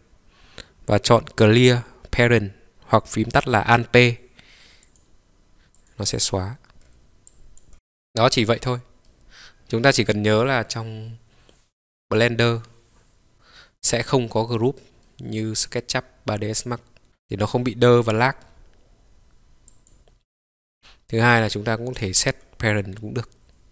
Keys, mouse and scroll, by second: 5.9 click, 6.5-6.9 scroll down 2, 6.9-7.4 scroll up 2, 7.7-8.3 middle drag, 7.7-8.3 scroll down 1, 8.6-9.1 scroll down 2, 9.2-10.2 middle drag, 15.1-17.5 middle drag, 19.7 click, 21.2-23.7 drag.